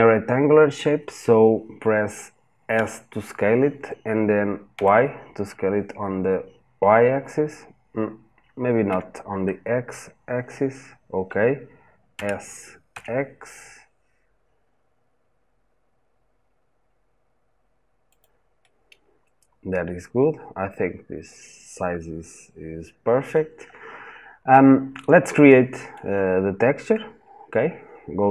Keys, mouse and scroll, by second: 2.5 s, 8.7 Escape, 11.9 s, 18.0 click, 18.4-21.4 middle drag, 23.5-24.3 scroll up 1, 24.3-27.3 middle drag.